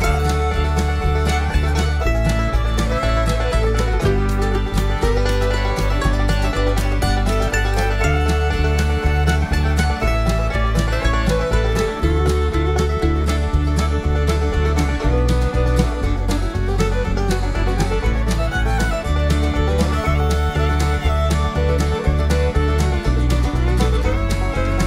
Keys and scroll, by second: 5.9 ], 6.1 ], 6.3 ], 6.5 ], 15.9 ], 16.1 ], 16.3 ].